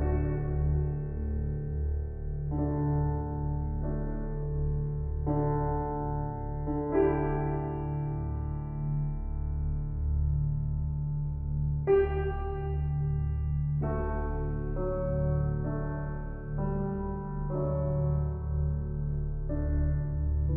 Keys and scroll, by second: 2.3 ctrl+t.